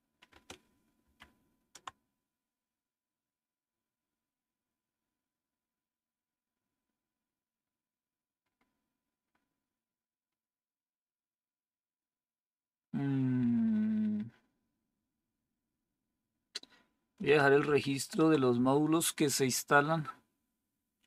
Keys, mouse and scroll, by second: 0.9 ctrl+-, 9.1-10.0 scroll up 1, 10.0-11.2 scroll up 1, 11.2-12.2 scroll up 1, 12.2-17.1 scroll up 1, 17.1-17.5 scroll up 1, 17.5 ctrl+-.